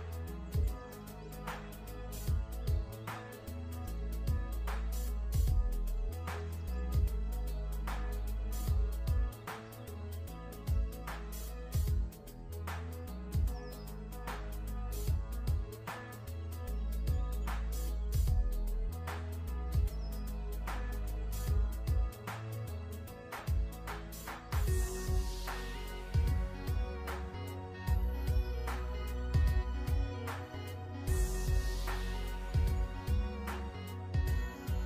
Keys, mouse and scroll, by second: 1.5 alt+shift+scroll down 1, 2.0 ctrl+z, 2.4 click, 2.8-3.3 alt+shift+scroll up 2, 3.3 ctrl+z, 3.6 click, 5.6 alt+Num_Lock, 5.8-6.4 alt+shift+scroll up 2, 6.4 click, 9.3 click, 26.8 click, 29.1 right click, 29.6 click.